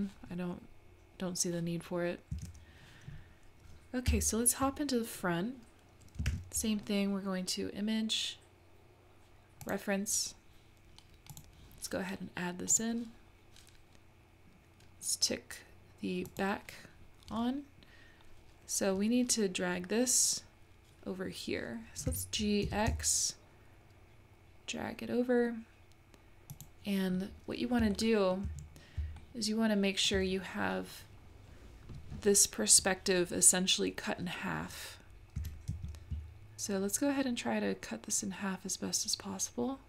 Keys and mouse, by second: 2.3 x, 4.1 `, 6.3 shift+a, 16.3 click, 22.1 g, 27.9 shift+middle click, 29.2-30.3 shift+middle drag, 35.4 g.